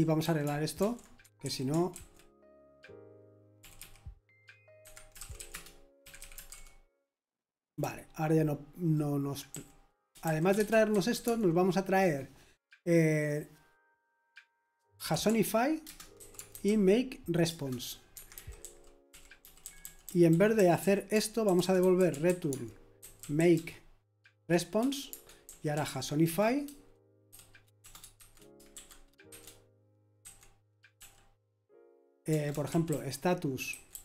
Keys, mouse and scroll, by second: 0.0-1.9 typing, 1.9 ctrl+d, 3.5-8.9 typing, 10.2-20.0 typing, 21.1-26.2 typing, 27.3-30.9 typing, 32.3-34.0 typing.